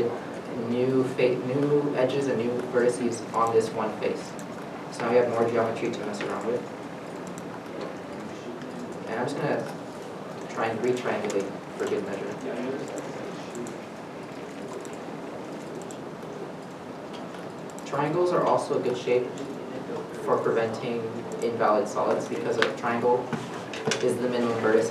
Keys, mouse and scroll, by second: 2.6 middle click, 2.6 1, 4.7 g, 5.7 middle click, 7.3 g, 10.0 a, 10.7 ctrl+t, 11.4 middle click, 13.9 g, 15.0 middle click, 15.2 g, 16.0 middle click, 17.2 g, 18.6 middle click, 19.8 middle click, 22.6 3, 23.1 middle click, 23.4 scroll up 1, 23.9-24.9 scroll down 1.